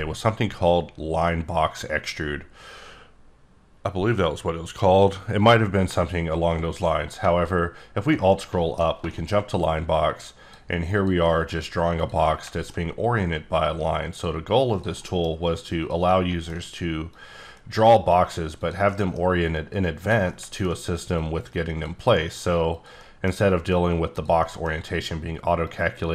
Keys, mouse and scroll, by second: 7.2 alt+Num_Lock, 7.4-7.7 alt+scroll up 1, 8.7 alt+scroll down 2, 9.1 shift+middle click, 9.7 click, 10.9 click, 11.2 middle click, 12.0 click, 12.2 middle click, 13.2 click, 14.7 click, 14.9 middle click, 15.8 click, 16.0 middle click, 17.1 click, 18.6 click, 18.8 middle click, 20.0 click, 21.1 click, 22.7 click, 23.0 middle click, 24.1 click, 24.4 middle click, 25.6 click.